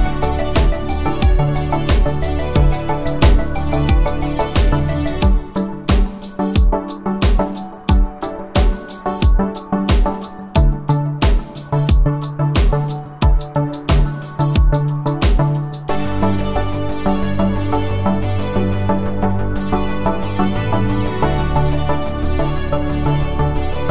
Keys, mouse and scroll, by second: 3.7-4.8 click, 5.7 click, 10.5-11.1 click, 12.7 c, 15.2 v, 16.3-17.2 click, 17.3 space, 21.1 space, 23.6 click.